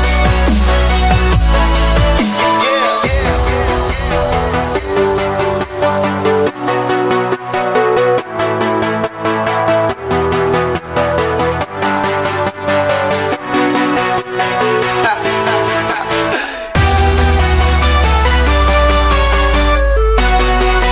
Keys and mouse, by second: 0.5 click, 1.4-3.0 drag, 3.1 click, 6.1 click, 8.0 click, 10.4 click, 15.2 KP_0, 18.6-20.9 middle drag.